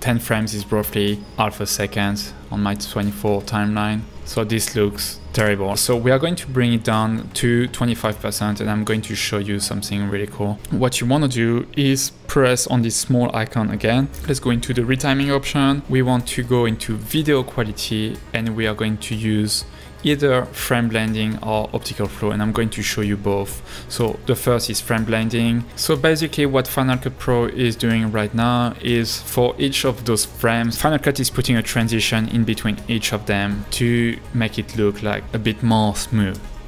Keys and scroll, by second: 5.4 h, 10.7 Right, 36.4 space.